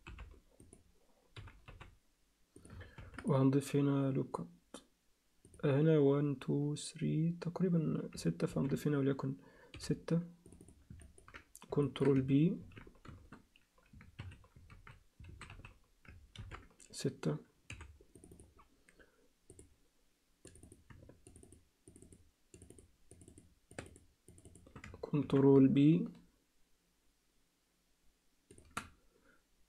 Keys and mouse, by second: 1.4 g, 2.9 ctrl+r, 8.4 ctrl+r, 11.0 ctrl+click, 11.8 ctrl+click, 12.6 ctrl+b, 14.7 ctrl+z, 15.3 alt+a, 15.5 z, 16.4 ctrl+r, 19.5 click, 20.6 click, 21.3 shift+click, 21.4 shift+click, 21.9 shift+click, 22.0 shift+click, 22.7 shift+click, 23.1 shift+click, 23.9 shift+click, 24.3 shift+click, 24.5 shift+click, 25.2 ctrl+b.